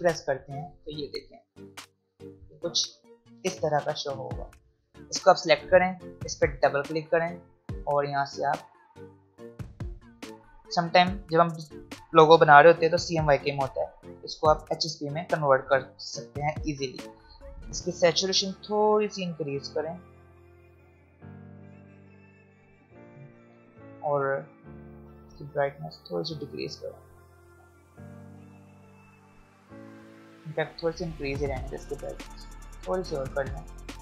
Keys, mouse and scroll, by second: 0.9-3.3 drag, 3.3 v, 3.7 click, 5.4 click, 13.0 click, 18.6-24.7 drag, 25.4-28.8 drag, 29.4-34.0 drag.